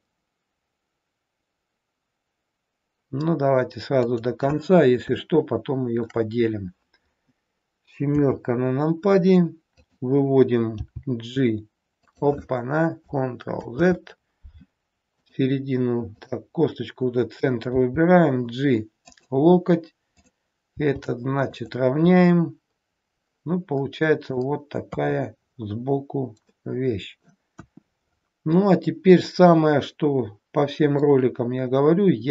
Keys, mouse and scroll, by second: 4.9 scroll up 1, 5.2 shift+middle click, 8.0 KP_7, 9.8 click, 10.8 g, 13.5 ctrl+z, 15.2 click, 16.2 click, 17.7 g, 20.2 click, 20.8 g, 22.2 middle click, 24.9 KP_3, 25.3-26.4 scroll down 4, 26.4 middle click, 27.5 KP_1, 28.2-29.5 scroll up 5.